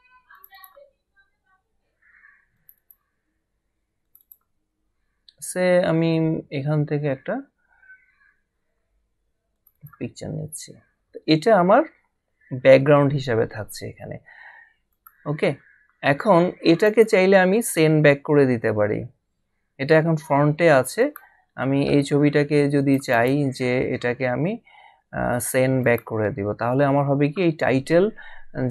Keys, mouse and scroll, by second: 0.3 click, 2.5 click, 9.5 click, 14.9 click, 21.0 click, 22.8 click, 25.8 click.